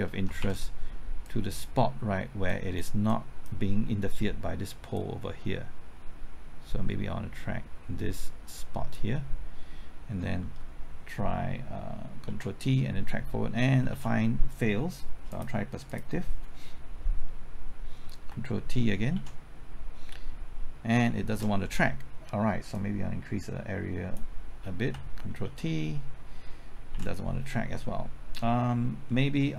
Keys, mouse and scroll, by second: 0.2 typing, 0.4 ctrl+z, 1.2-9.8 drag, 10.5 typing, 12.2 ctrl+t, 13.7 typing, 13.9 ctrl+z, 15.2 click, 19.1 ctrl+t, 21.3 ctrl+z, 22.7-24.8 drag, 25.7 ctrl+t, 26.7 typing, 26.9 ctrl+z.